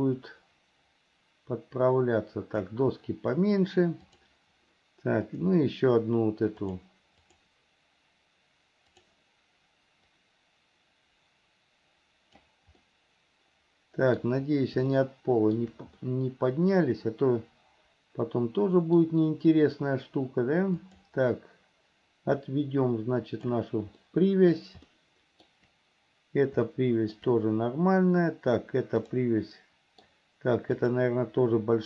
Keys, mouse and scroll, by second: 0.0-2.9 drag, 4.2 click, 5.4 click, 6.8-9.4 drag, 10.2 click, 10.7-12.8 drag, 13.0-14.5 middle drag, 15.1 shift+middle click, 16.2-19.2 middle drag, 20.9 click, 22.7-23.8 drag, 24.2 middle click, 25.1 shift+middle click, 26.9 shift+middle click, 29.2 click, 29.7 middle click, 30.9 click.